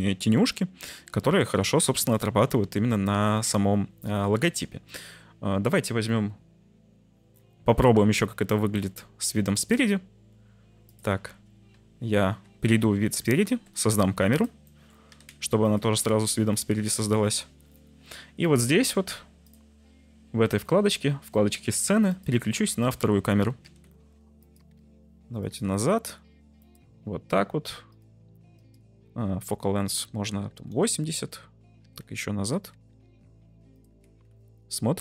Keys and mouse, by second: 2.4 Tab, 3.3 Tab, 6.2 t, 7.7 middle click, 7.9 z, 8.7 middle click, 9.3 middle drag, 10.8 click, 12.2 `, 13.4 shift+a, 14.6 drag, 15.1-16.8 typing, 15.6 click, 22.2 click, 23.6-25.7 typing, 24.4 click, 25.4 click, 26.6 click, 28.6-30.7 drag, 31.8 g, 32.0 z, 32.7 u, 33.0 y, 33.7 click, 34.0 z.